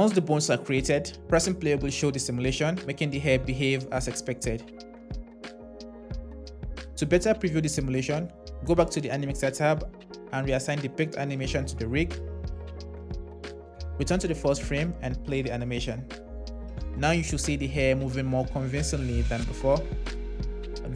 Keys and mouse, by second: 0.8 space, 7.1 space, 9.0 click, 11.0-12.3 drag, 14.1 click, 15.2 space.